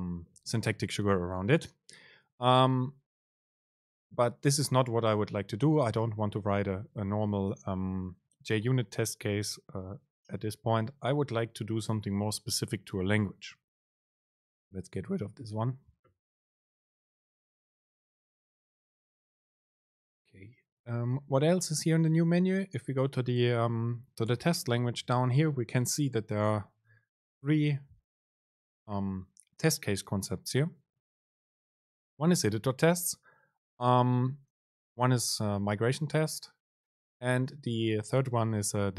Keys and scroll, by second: 17.2 Delete.